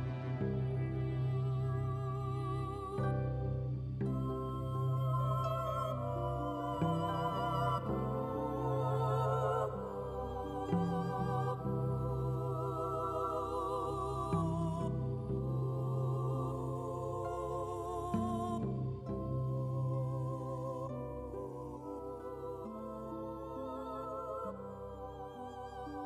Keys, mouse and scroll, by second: 16.8 click, 17.3 click, 18.5 middle click, 19.3 KP_1, 19.8 s, 21.9 KP_3, 22.3 g, 23.5 click, 25.6 middle click.